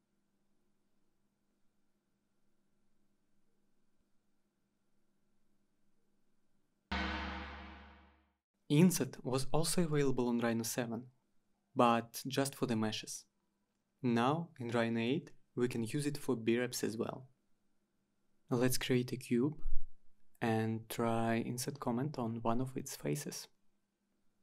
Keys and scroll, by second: 12.6-14.4 typing, 15.1 Return, 17.8 typing, 19.8 Return.